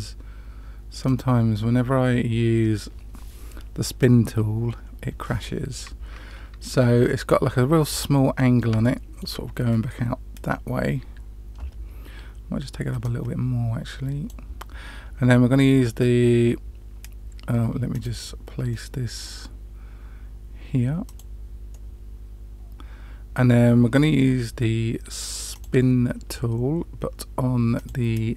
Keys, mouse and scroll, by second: 8.0-8.6 middle drag, 8.8-9.2 shift+middle drag, 13.0 click, 17.9 click, 18.7 middle click, 21.0 click, 21.7-23.9 middle drag, 25.5 click, 27.7 click.